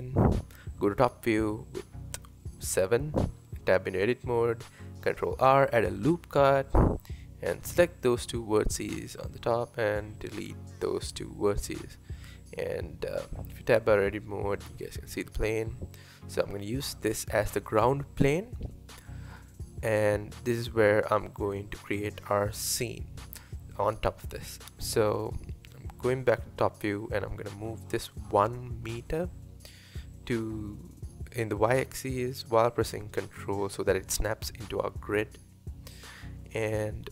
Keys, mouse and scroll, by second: 0.1 KP_7, 0.8-1.1 scroll up 4, 1.6-2.0 scroll down 2, 2.1 Tab, 3.8 ctrl+r, 6.9 click, 7.1 click, 8.3 x, 9.8-10.9 scroll down 2, 10.9 KP_1, 11.6-12.0 scroll up 1, 12.0 Tab, 12.5-14.9 middle drag, 14.9 scroll up 4, 15.3-15.7 scroll down 3, 15.7-18.0 middle drag, 18.0 KP_1, 18.7 scroll up 4, 20.2-22.3 shift+middle drag, 22.3 scroll down 4, 23.8 KP_7, 24.6-25.3 scroll down 1, 25.3 scroll up 1, 25.6 Tab, 26.6 click, 27.1 click, 27.8-28.7 scroll down 2, 29.5 g, 34.4-36.6 scroll down 1, 36.6-37.1 scroll up 2.